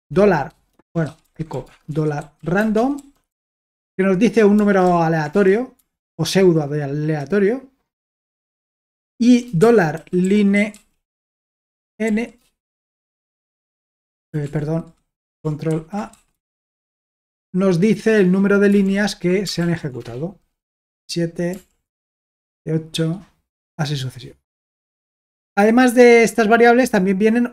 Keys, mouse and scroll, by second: 1.0-3.8 typing, 4.9 ctrl+p, 5.3 Return, 6.0 ctrl+p, 8.7 Return, 9.4-12.1 typing, 12.6 Return, 14.4 ctrl+p, 15.7 ctrl+a, 15.9-17.2 typing, 18.8 ctrl+l, 19.6 ctrl+p, 20.0 Return, 21.5 ctrl+p, 22.0 Return, 25.0-26.2 scroll down 2, 26.6-27.5 scroll down 1.